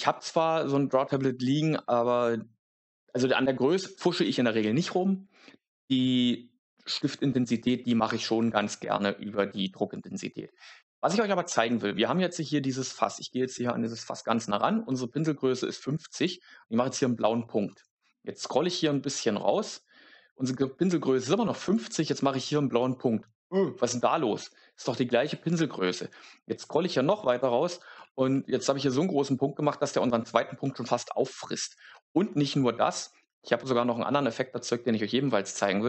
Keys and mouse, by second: 16.1 click, 21.6 click, 27.2 click, 32.2 middle click.